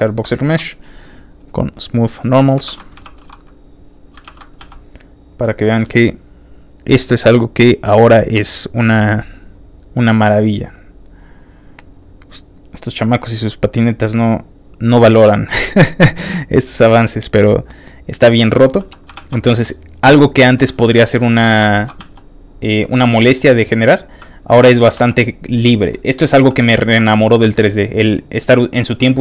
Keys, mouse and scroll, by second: 1.4 click, 2.1 click, 2.6 ctrl+r, 3.9 ctrl+click, 4.2 ctrl+r, 4.8 ctrl+click, 5.0 ctrl+click, 5.2 ctrl+click, 5.4 ctrl+middle click, 6.8 ctrl+click, 8.0 click, 8.3 click, 9.3 click, 10.4-11.9 drag, 12.4 click, 13.6 click, 14.9 click, 16.3 click, 17.5 click, 18.4 middle click, 18.8 f, 18.9 click, 19.3 shift+click, 19.3 f, 19.7 shift+click, 19.9 click, 20.1 click, 20.3 middle click, 20.7 click, 21.0 middle click, 21.4 f, 21.5 click, 21.7 shift+middle click, 22.0 shift+f, 22.1 click, 22.4 click, 22.6 click, 22.8 click, 22.9 click, 23.3 click, 23.5 click, 23.8 click, 24.0 click, 24.1 click, 24.6 middle click, 24.9 f, 25.0 click, 25.2 click, 25.4 click, 25.8 middle click, 26.4 f, 26.5 click, 26.7 shift+middle click, 27.0 middle click, 27.0 middle click, 27.5 click, 27.7 click, 27.9 click, 28.1 click, 28.5 click, 28.9 click, 29.1 click.